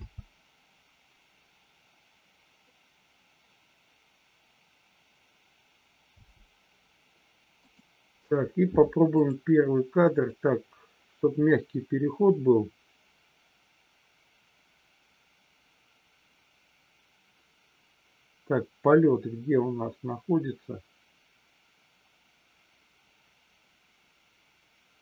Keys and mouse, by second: 6.2 space, 7.7 click, 9.2 click, 10.3-25.0 drag.